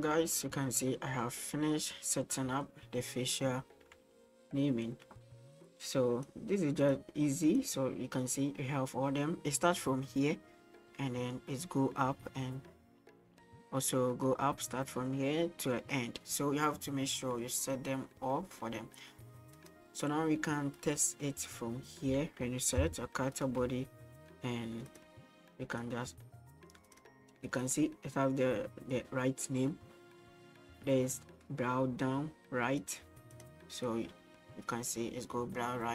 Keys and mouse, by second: 2.3 middle click, 5.7-6.2 drag, 6.8-17.2 drag, 17.6-18.6 middle drag, 19.5 right click, 20.8-22.4 right drag, 22.8 g, 25.8-26.9 drag, 27.5 click, 27.7-33.4 drag, 33.8-35.9 drag.